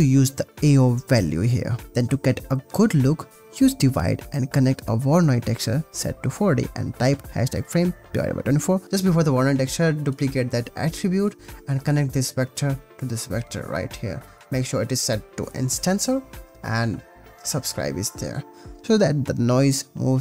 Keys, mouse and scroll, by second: 2.8 click, 3.1 click, 3.8 shift+a, 4.7 click, 5.4 click, 6.0 click, 6.3 click, 6.8-8.3 shift+drag, 9.5 click, 10.9 click, 11.5 click, 18.8 space.